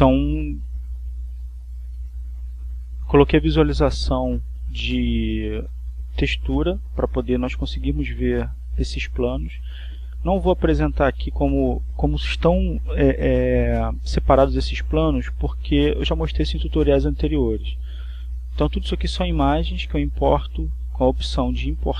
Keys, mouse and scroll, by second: 0.4 click, 1.8 click, 2.5 click, 3.3 click, 4.3 click, 6.4-8.2 drag, 9.2-11.2 drag, 21.8 click.